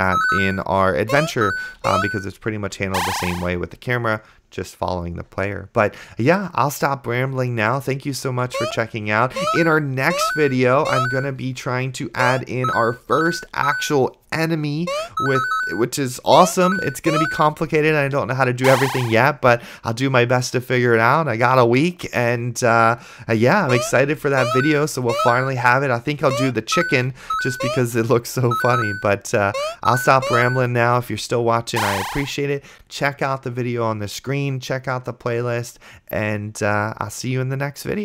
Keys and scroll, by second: 2.2 d, 2.8 a, 8.1 d, 8.5 a, 8.8 space, 11.4 d, 12.4 space, 13.4 a, 13.9 d, 15.1 space, 17.3 a, 17.9 d, 23.9-26.5 typing, 27.8 space, 30.3 a, 31.0 d.